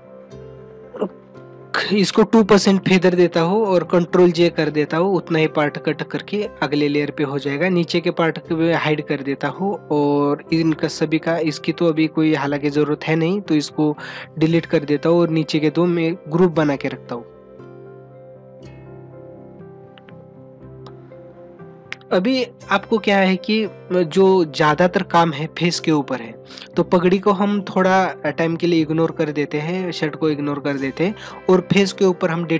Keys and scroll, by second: 21.3 ctrl+=, 26.5 ctrl+=, 29.6 ctrl+-.